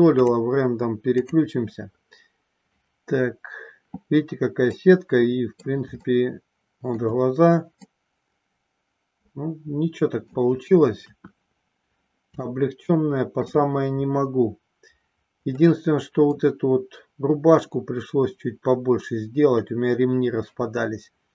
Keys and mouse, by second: 0.1-1.6 drag, 4.7 middle click, 6.1 shift+middle click, 7.8-10.3 middle drag, 11.1 KP_1, 12.5 shift+middle click, 15.6 middle click.